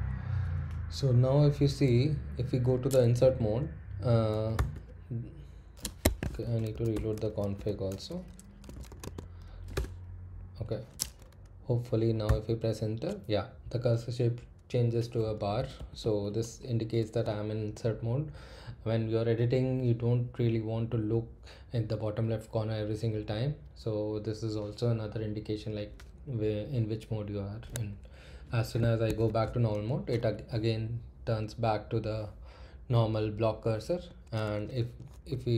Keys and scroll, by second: 2.0 Up, 4.5 i, 6.0 Escape, 6.4-9.4 typing, 6.9 Return, 9.7 Return, 11.1 typing, 12.2 i, 15.3 Left, 15.5 Left, 15.7 Left, 16.0 Right, 16.2 Right, 28.8 Escape.